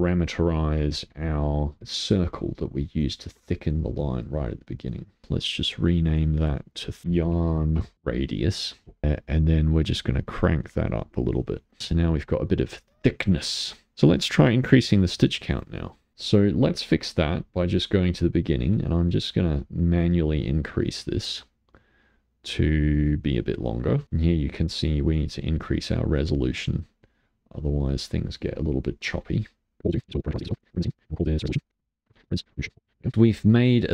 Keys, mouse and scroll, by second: 1.0-2.7 drag, 3.8 click, 5.3 scroll down 5, 6.0 click, 7.0 BackSpace, 9.0-10.2 middle drag, 10.5-11.8 drag, 11.8-15.1 middle drag, 15.1-16.1 drag, 16.1 middle click, 16.7-17.8 scroll up 8, 17.8-18.8 middle drag, 18.8 click, 19.9-21.6 drag, 21.6-23.0 scroll down 10, 23.0 scroll down 1, 23.1-24.8 middle drag, 24.8-29.5 drag, 29.5 scroll down 3, 29.8 middle click, 30.1 middle click, 30.1 scroll down 1, 30.2 middle click, 30.3 click, 30.5 shift+d, 30.7 scroll up 2, 30.9 middle click, 31.1 click, 31.6 click, 32.0 click.